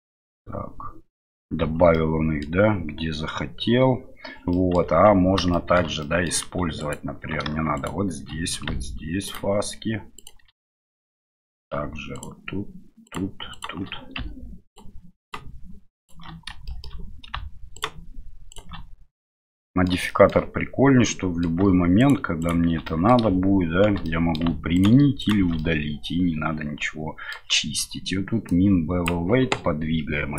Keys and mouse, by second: 0.2 Tab, 1.9 middle click, 4.5 middle click, 4.8 Tab, 5.5 middle click, 6.0 middle click, 6.8 alt+right click, 7.8 alt+shift+right click, 10.6 middle click, 12.1 alt+shift+right click, 13.0 alt+shift+right click, 13.5 alt+shift+right click, 14.7 alt+shift+right click, 15.2 alt+shift+right click, 16.0 alt+shift+right click, 16.6 shift+middle click, 17.7 alt+shift+right click, 19.2 middle click, 20.0 shift+middle click, 21.0 middle click, 22.0 alt+shift+right click, 22.4 alt+shift+right click, 22.8 middle click, 24.0 middle click, 24.7 alt+shift+right click, 25.2 alt+shift+right click, 25.6-27.3 middle drag, 28.5 click.